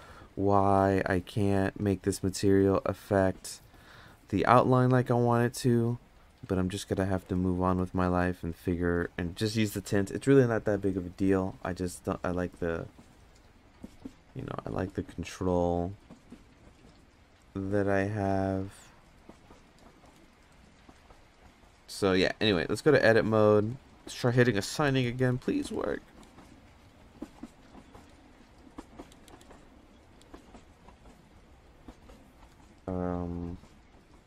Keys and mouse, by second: 1.8 click, 7.4 click, 7.8 click, 8.2 click, 13.1 click, 18.3 click, 20.0 click, 22.8 Tab, 23.7 click, 24.0 click, 24.1 click, 24.4 click, 24.5 click, 24.8 click, 25.0 click, 25.1 click, 25.4 click, 25.6 click, 26.2 click, 27.5 click, 28.1 click, 29.2 click, 30.2 click.